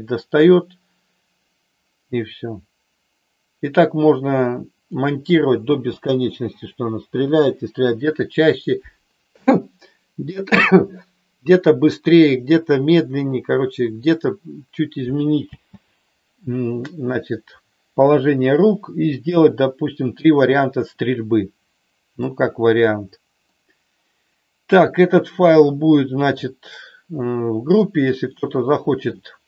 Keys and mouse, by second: 5.6 space, 15.6 space, 23.5-24.7 middle drag, 25.6 shift+middle click, 27.1 middle click, 28.3 shift+middle click.